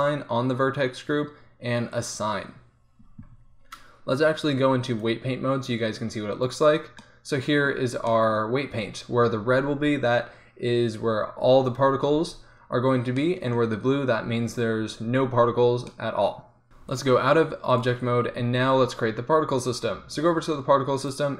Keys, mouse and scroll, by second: 6.3 click, 18.8-21.1 middle drag.